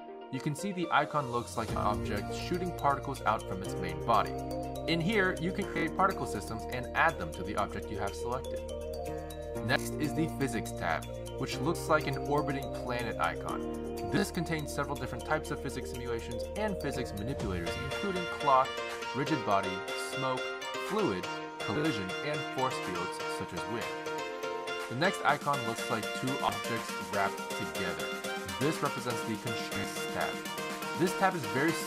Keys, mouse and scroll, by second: 1.2 click, 6.4 click, 11.7 click, 26.6 click, 29.5 click.